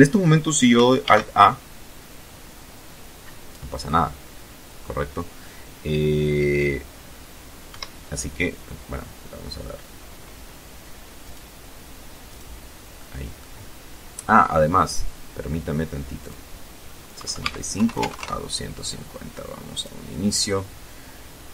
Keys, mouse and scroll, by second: 6.2 Escape, 9.7 right click, 10.8 right click, 11.4 middle click, 14.7 click, 15.7-16.6 typing, 15.9 Tab, 16.7 KP_Enter, 18.2 click, 20.1 click, 21.3 alt+a.